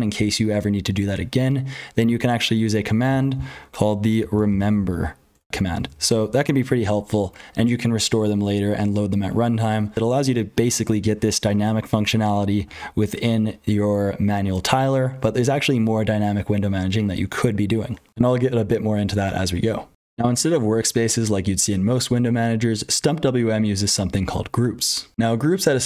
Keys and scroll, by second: 0.0-25.8 typing, 3.0 ctrl+z, 5.3 Tab, 5.9 ctrl+g, 18.1 F12, 20.0 F12, 25.1 F12.